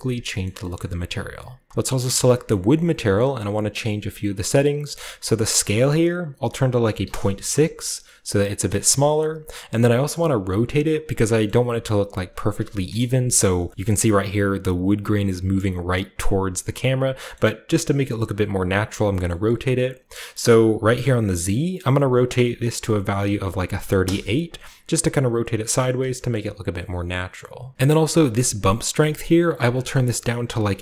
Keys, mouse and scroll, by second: 1.8 click, 1.8-5.3 right drag, 2.4-3.6 middle drag, 5.3 click, 6.7 typing, 7.0 Return, 8.0 middle click, 8.9-11.2 middle drag, 9.4-11.2 shift+scroll down 1, 11.4-12.8 middle drag, 12.8 KP_0, 13.3-15.6 scroll up 1, 13.7-15.6 shift+middle drag, 16.2-17.0 scroll down 1, 17.0 shift+scroll down 1, 17.2-17.6 shift+scroll up 1, 17.3-17.6 shift+middle drag, 19.2-21.6 shift+middle drag, 21.6 click, 23.6 typing, 23.9 Return, 26.0-27.7 shift+middle drag, 26.6-27.7 scroll up 1, 29.5-30.5 drag.